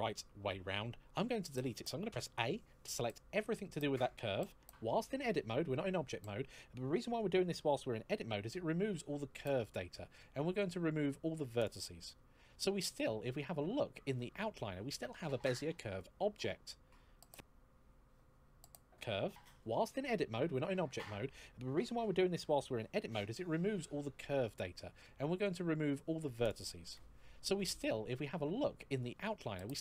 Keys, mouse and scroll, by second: 1.9 a, 8.5 x, 11.3 click, 23.4 x, 26.1 click.